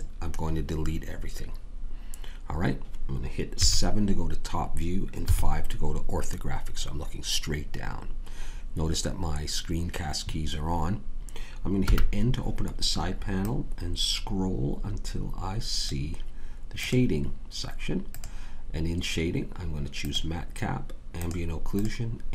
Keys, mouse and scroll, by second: 3.5 KP_7, 5.3 KP_5, 11.7 n, 13.3-15.2 drag, 16.7-22.3 drag.